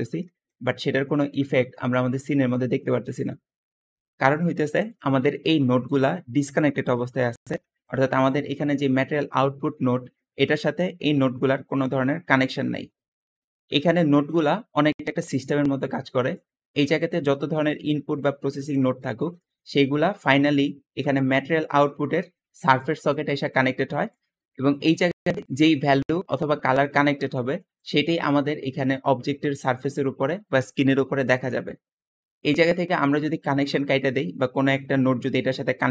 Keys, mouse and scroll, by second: 0.2 `, 3.7 Escape, 5.0 g, 5.1 g, 7.7-9.1 drag, 9.5 click, 10.1 click, 15.4-16.4 middle drag, 15.4 scroll down 1, 17.0 g, 18.9 middle click, 19.5-20.0 middle drag, 19.5-20.2 scroll down 2, 20.0 click, 21.5-22.9 drag, 23.3 click, 23.9 click, 25.2 click, 26.0 click, 27.6 click.